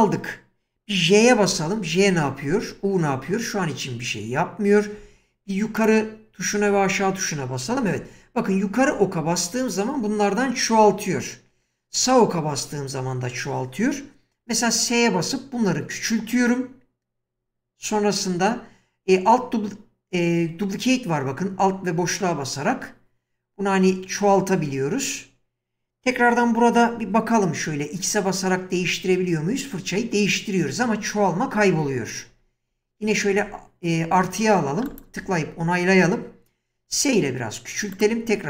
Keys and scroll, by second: 1.5-3.3 typing, 6.5 Up, 14.4 s, 28.0 typing, 29.9-33.4 typing, 36.8 s.